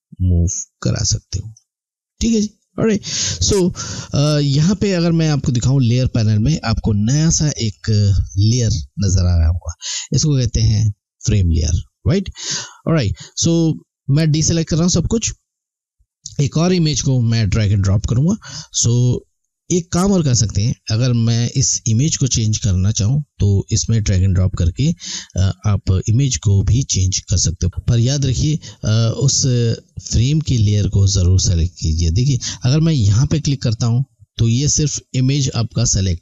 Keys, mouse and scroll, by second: 13.8 click, 27.7 click, 33.0 click.